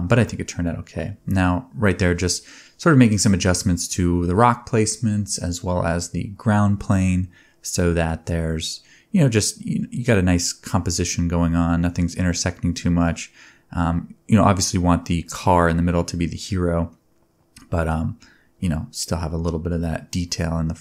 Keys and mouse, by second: 0.0 click, 0.2 g, 0.6 s, 0.9 shift+middle click, 0.9 g, 2.0 Tab, 3.1 click, 3.1 middle click, 3.4 Tab, 3.9-6.0 drag, 6.0-6.3 middle drag, 6.3 click, 6.4-8.3 middle drag, 6.8 g, 7.1 r, 8.5 g, 9.6 r, 10.1 g, 11.2 ctrl+b, 13.1 click, 13.2 space, 17.3 space, 17.5 space, 20.0 space, 20.3 shift+a.